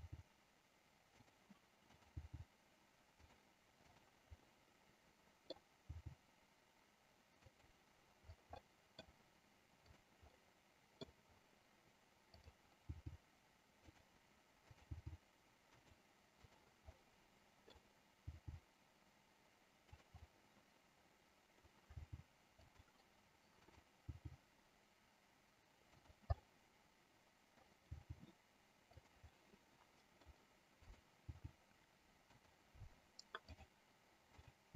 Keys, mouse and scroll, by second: 1.4 click, 2.0 click, 3.2 click, 3.2 g, 3.9 click, 4.6-5.8 middle drag, 6.0 g, 7.5 click, 8.6 middle click, 8.6-9.0 scroll up 1, 9.9 click, 10.4 middle click, 10.4 scroll up 1, 12.4 click, 14.0 click, 15.9 click, 15.9 g, 16.4 click, 17.0 middle click, 18.4 g, 20.4-21.7 middle drag, 22.7 click, 23.8 click, 26.0 click, 26.6-27.9 middle drag, 29.4 middle click, 30.9 click, 32.5 click, 33.7 click, 34.5 click.